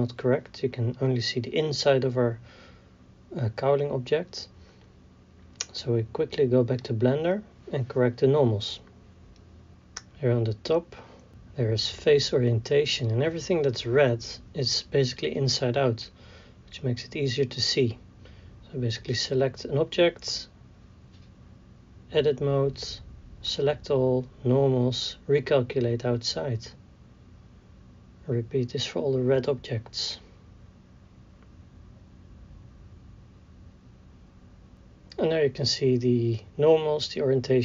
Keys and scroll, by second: 3.6 d, 4.3 a, 5.1 alt+Tab, 9.7 Tab, 22.2 Tab, 22.8 a, 27.6 Tab, 29.9 Tab, 30.3 a, 34.3 Tab, 34.7 a.